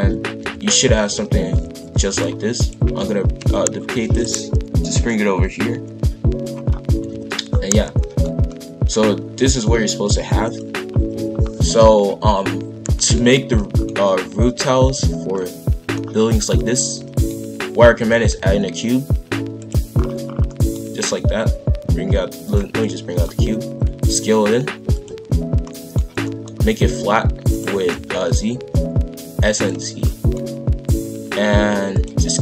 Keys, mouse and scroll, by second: 2.5 click, 3.3 ctrl+l, 4.0 shift+d, 5.0 click, 6.6-6.9 scroll down 1, 6.9 KP_5, 7.0 KP_1, 7.4-8.0 scroll down 1, 8.0-11.2 shift+middle drag, 11.2-11.9 scroll up 2, 12.9-15.3 middle drag, 15.3-16.0 scroll up 1, 16.0-16.5 scroll down 2, 16.5-18.3 middle drag, 18.3 shift+a, 19.9 scroll down 1, 20.2 scroll up 3, 20.4 middle click, 21.0 g, 22.8 middle click, 23.2-23.6 scroll up 1, 23.7 s, 25.6-26.7 middle drag, 26.7 s, 27.7 s, 30.0 middle click, 30.6 s.